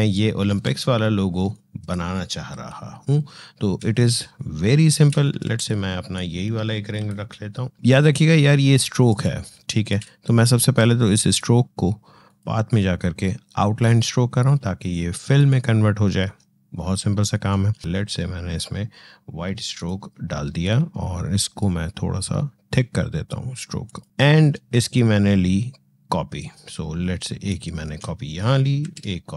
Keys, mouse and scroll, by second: 0.4 Escape, 1.3 click, 2.4 Delete, 3.6 space, 3.8 click, 4.1 space, 5.2 ctrl+z, 5.9 click, 6.8 Delete, 7.9 click, 9.1 space, 9.2 click, 19.5 click, 23.7-28.6 drag, 28.6 ctrl+d.